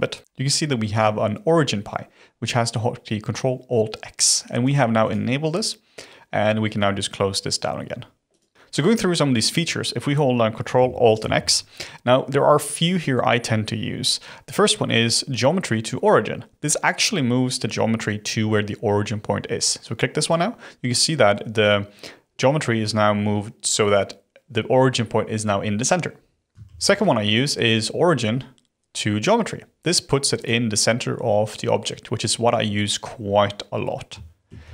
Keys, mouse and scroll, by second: 11.1 ctrl+alt+x, 26.5 ctrl+z, 26.6 ctrl+alt+x, 34.5 ctrl+z.